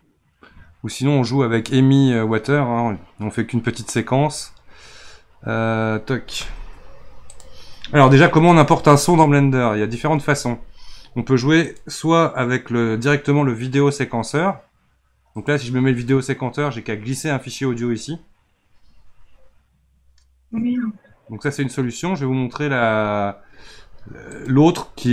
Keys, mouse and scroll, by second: 11.7-14.8 drag, 21.4-25.1 drag.